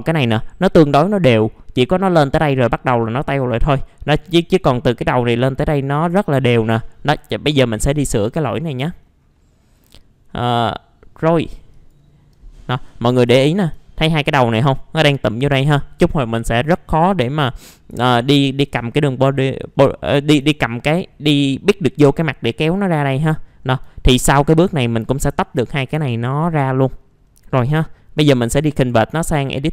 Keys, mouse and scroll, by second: 8.4-8.9 scroll down 1, 8.9 middle click, 9.0-9.3 scroll down 1, 9.3 middle click, 10.6 scroll down 1, 11.0 middle click, 11.4-11.7 scroll up 1, 11.7 click, 12.3-12.9 scroll up 1, 12.9 click, 13.4 alt+middle click, 13.8 scroll up 1, 16.9-17.9 scroll down 1, 18.0 alt+middle click, 20.2 scroll up 1, 20.5-22.1 alt+middle drag, 22.9 scroll down 1, 23.2 middle click, 23.6 scroll up 1, 23.9 alt+middle click, 24.4-25.9 scroll up 1, 25.9 F4, 27.0-28.5 scroll down 1, 28.5 right click.